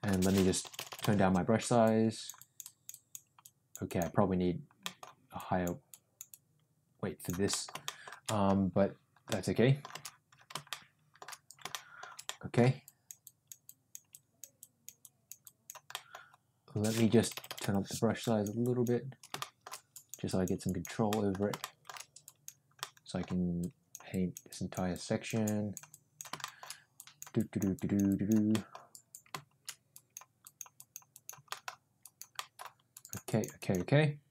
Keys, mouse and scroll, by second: 0.5 [, 0.7 [, 0.8 [, 0.9 [, 1.8 click, 2.3 click, 3.4 click, 3.8 click, 4.7 middle click, 5.3 click, 5.8 click, 6.2-7.3 drag, 7.4 middle click, 7.8 shift+middle click, 8.2 middle click, 9.2 middle click, 10.7 shift+middle click, 11.7 shift+middle click, 12.2 middle click, 12.8 click, 13.2 click, 13.7 click, 14.1 click, 14.6 click, 15.0 click, 15.4 click, 15.9 middle click, 17.1 ], 17.3 ], 17.4 ], 17.5 ], 18.3 click, 18.6 click, 19.3 shift+middle click, 19.9 click, 20.2 click, 20.6 click, 21.0 middle click, 21.5 shift+middle click, 22.2 click, 22.7 middle click, 23.6 click, 24.1 click, 24.5 click, 24.9 click, 25.5 click, 25.9 click, 26.4 shift+middle click, 26.9 click, 27.4 click, 27.7 click, 28.1 click, 28.5 middle click, 29.9 click, 30.4 click, 30.7 click, 31.1 click, 31.4 middle click, 31.9 click, 32.3 middle click, 32.9 click, 33.2 click, 33.5 click.